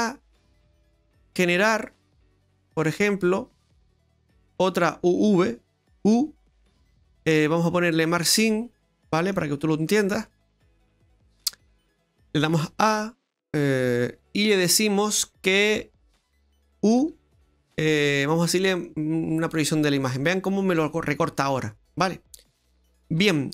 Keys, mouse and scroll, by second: 0.8 right click, 2.6 click, 3.5 right click, 4.1 alt+shift+right click, 4.6 alt+shift+right click, 4.9 middle click, 6.1 u, 8.7 scroll down 2, 8.9 middle click, 12.6 a, 13.6 click, 17.0 u, 20.0 scroll down 2.